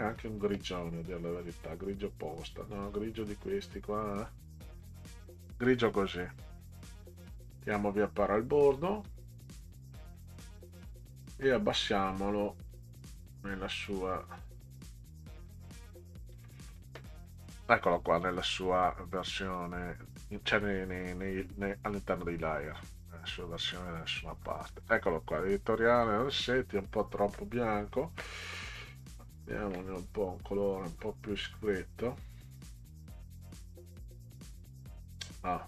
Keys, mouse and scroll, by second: 3.4 click, 4.2 click, 4.9 click, 8.3 click, 9.0 scroll up 2, 9.6 click, 12.7 click, 13.9 click, 16.3 click, 19.6-21.4 drag, 23.7 click, 26.0 click, 28.9 click, 31.0-31.3 scroll down 6, 33.1 click.